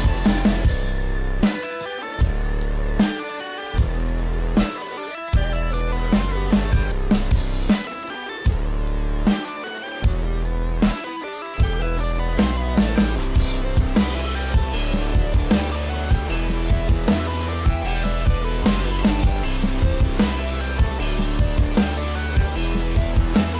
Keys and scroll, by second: 19.1 space.